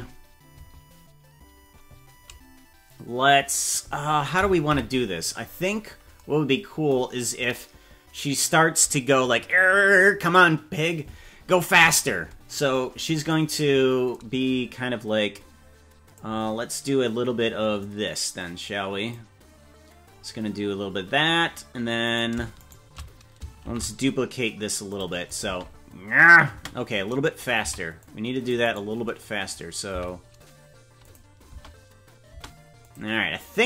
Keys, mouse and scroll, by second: 0.6 space, 4.8 KP_Decimal, 5.4-6.3 scroll down 6, 15.3 click, 17.8-19.1 drag, 22.0 right click, 22.7 shift+right click, 23.6 shift+d, 25.3 click, 25.6 space, 26.6 space, 27.7 c, 29.2 click, 29.9 s, 31.5 space, 32.3 space, 32.8 click.